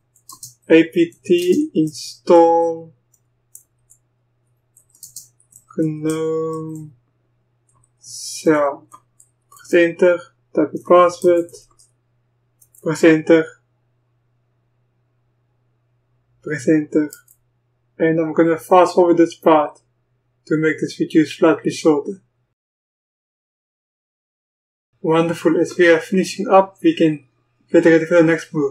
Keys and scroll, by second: 0.0-9.7 typing, 11.0-11.7 typing, 12.8 typing, 17.3 Return.